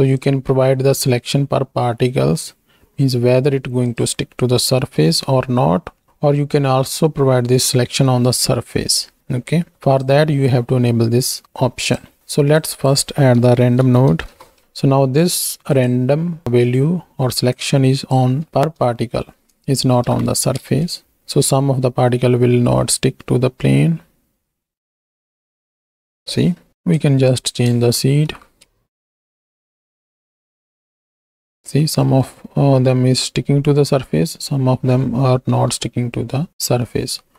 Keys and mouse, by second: 0.3-3.9 drag, 6.0 middle click, 10.0-11.9 drag, 12.7-14.6 drag, 15.7-16.4 drag, 17.6 click, 19.0 shift+middle click, 20.0 shift+Right, 20.1 shift+Left, 20.6 space, 24.9 space, 25.7-26.4 drag, 26.7 shift+Left, 26.7 KP_1, 28.1 shift+Right, 28.6 shift+Left, 28.6 space, 31.3 space, 31.8-32.2 middle drag, 33.9-34.5 middle drag, 35.5 KP_1, 36.5 click, 37.2 x.